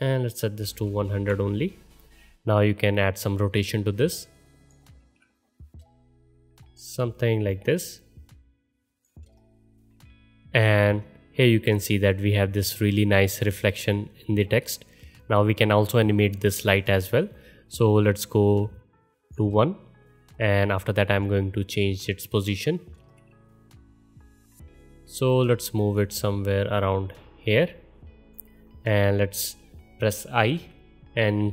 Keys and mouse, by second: 0.9 KP_0, 5.0 ctrl+z, 7.7-13.4 middle drag, 14.4-16.3 middle drag, 19.4 middle click, 23.0 ctrl+z, 30.5 i.